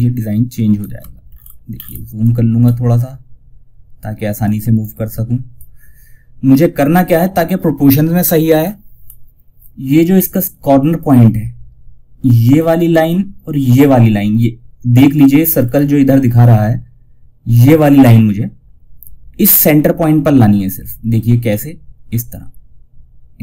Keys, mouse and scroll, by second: 0.6 alt+scroll up 1, 1.9 scroll up 1, 3.7-7.9 drag, 7.9 scroll up 1, 14.9 scroll up 1, 19.4 scroll down 1, 20.8-23.4 drag.